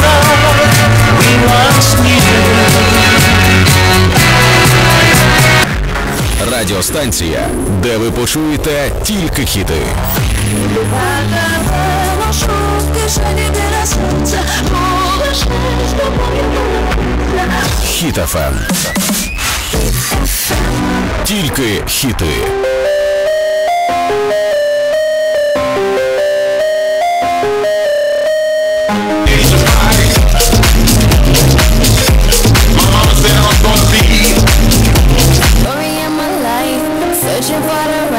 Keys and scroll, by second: 5.5 Page_Down, 35.5 Page_Down.